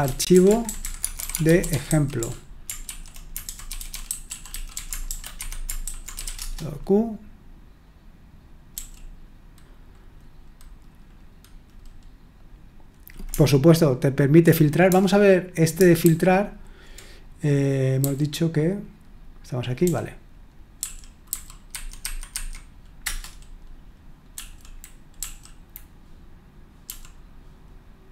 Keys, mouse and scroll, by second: 0.0-6.9 typing, 3.5 ctrl+w, 8.7 k, 16.0 super+h, 18.0 h, 19.8-21.8 typing, 22.0 Escape, 22.3 Escape, 23.0 Return, 24.3 l, 25.2 Right, 26.8 j.